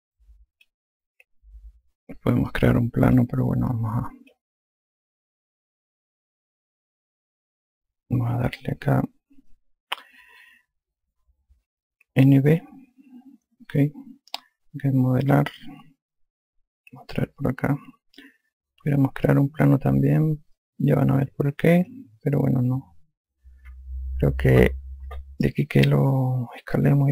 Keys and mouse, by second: 0.6 click, 3.5 click, 4.7 click, 9.3 alt+click, 13.1 n, 13.4 b, 15.9 click, 17.7 click, 21.2 click.